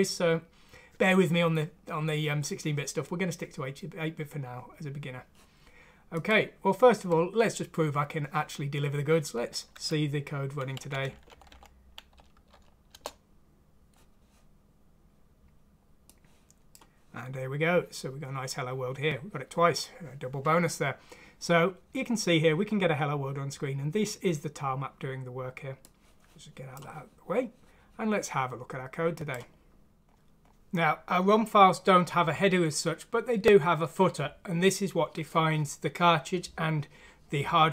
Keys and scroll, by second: 9.8 F6, 10.8 Left, 11.1 Down, 11.3 Down, 11.5 Down, 13.6 F6, 13.6 Return.